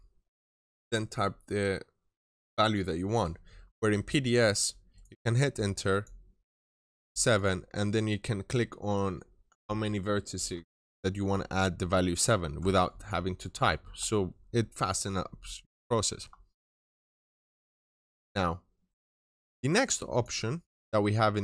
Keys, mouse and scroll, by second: 3.7 scroll down 1, 3.9 middle click, 4.8 right click, 5.7 click, 7.7 scroll down 1, 7.8 middle click, 15.5 scroll down 1, 15.7 middle click, 16.7-17.3 scroll up 1, 17.3 middle click, 18.8 right click, 20.0 click.